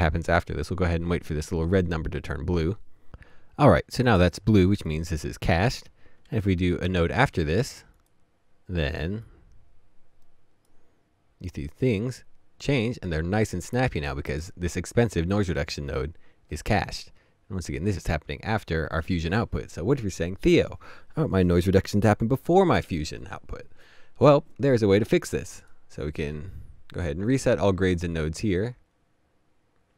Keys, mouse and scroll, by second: 6.5 Up, 6.8 alt+s, 25.6 alt+s, 25.6 right click.